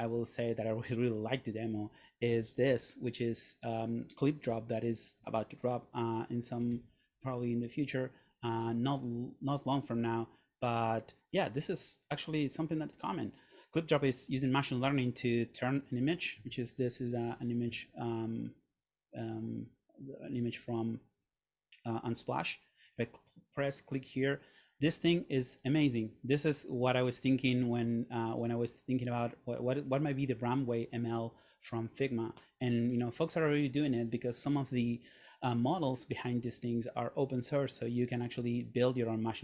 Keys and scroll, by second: 2.8 super+., 4.7 super+/, 7.0 shift+c, 7.2 l, 9.1 Return, 16.8 super+..